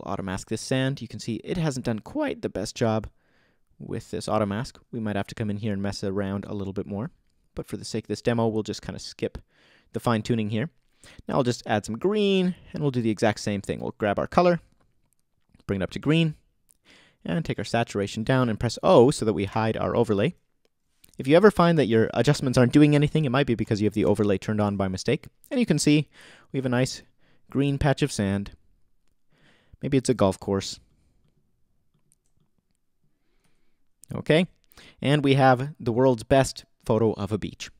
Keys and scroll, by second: 2.9 super+z, 19.5 o.